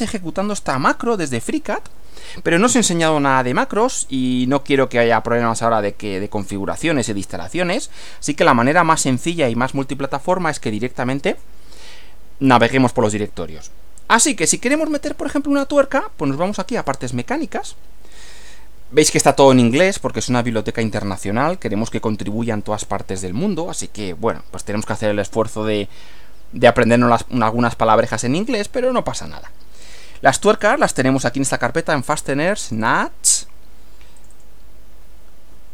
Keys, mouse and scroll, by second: 16.7 click, 30.6 click, 32.8 click, 34.2 click.